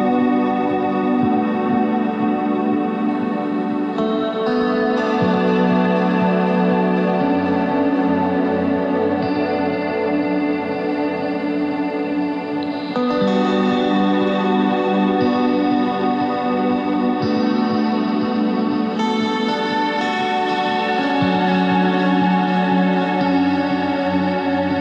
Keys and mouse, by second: 0.0 ctrl+r, 0.7 z, 1.0 c, 2.5-3.9 drag, 3.9 s, 5.5 z, 12.0 z, 13.9 c, 14.5 z, 15.8 click, 16.7 click, 19.7 middle click, 21.4-24.2 middle drag, 24.4 z, 24.6 c.